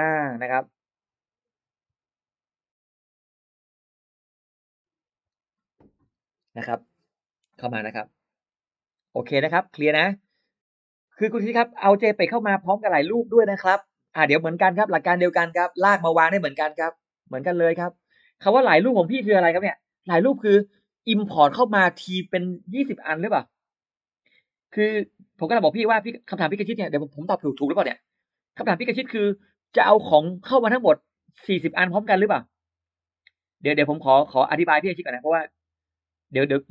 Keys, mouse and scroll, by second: 0.0 middle click.